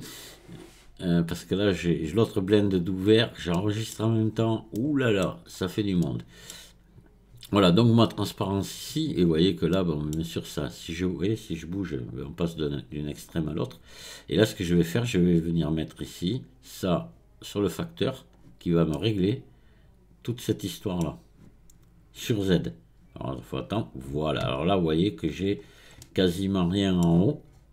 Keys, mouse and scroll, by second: 2.1-3.5 drag, 3.5-4.3 middle drag, 4.3 scroll down 4, 4.7-5.5 middle drag, 5.5 scroll up 1, 6.0-9.1 middle drag, 9.7-11.0 middle drag, 11.0-14.0 drag, 16.1 click, 18.9-23.1 middle drag, 24.6 scroll up 3, 25.6-26.0 scroll down 3, 26.0-27.5 middle drag, 27.5 scroll up 3.